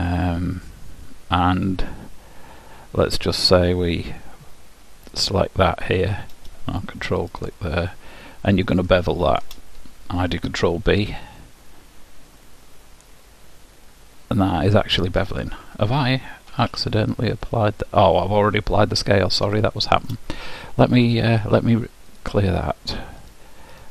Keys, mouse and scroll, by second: 1.0-3.5 middle drag, 3.5-7.0 drag, 7.4-9.3 drag, 8.2 middle click, 9.0-10.8 middle drag, 10.9 ctrl+b, 16.6 Tab, 18.8 middle click, 19.8-22.3 middle drag, 22.3-23.9 drag.